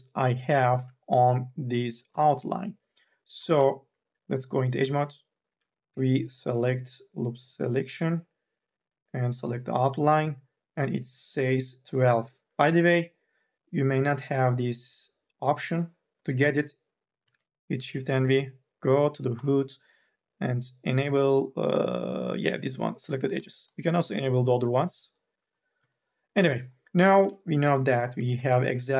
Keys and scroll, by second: 1.8 u, 2.3 l, 3.3 e, 5.7 v, 17.4 shift+v, 25.9 3, 28.1 e, 28.3 2.